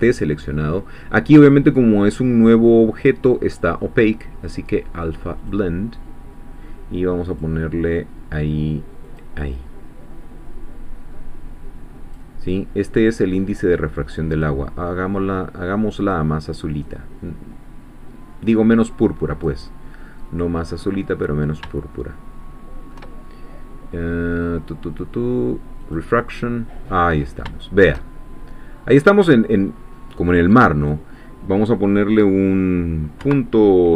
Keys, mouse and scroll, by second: 0.0 click, 3.5 click, 5.4 click, 7.3 click, 9.1 click, 9.5-12.3 drag, 12.8 middle click, 14.3 click, 16.0 click, 16.9-19.6 drag, 19.7 scroll down 2, 20.1 click, 21.0-21.4 scroll up 2, 21.7 shift+click, 21.7-23.1 shift+middle drag, 25.8 click, 26.9-27.3 scroll up 1, 27.5 shift+click, 27.5 shift+middle click, 28.1-28.6 shift+scroll down 2, 28.8 scroll up 1, 29.3-29.8 scroll down 2, 30.8-33.2 drag, 33.2 ..